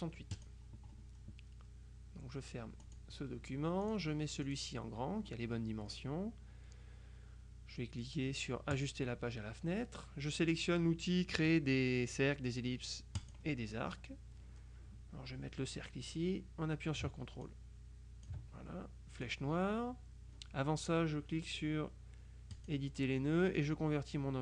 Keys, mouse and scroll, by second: 0.4 click, 2.9 click, 3.9 click, 4.6 click, 8.8 click, 13.3 click, 17.5 ctrl+click, 19.3 click, 22.6 click.